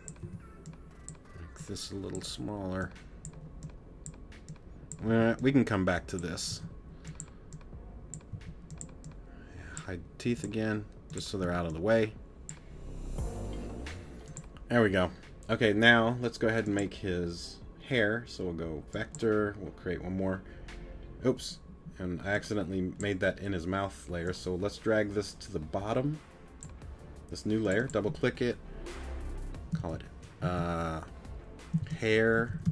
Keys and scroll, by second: 0.2 t, 5.1 t, 6.5 t, 8.3 t, 11.4 t, 30.9 BackSpace.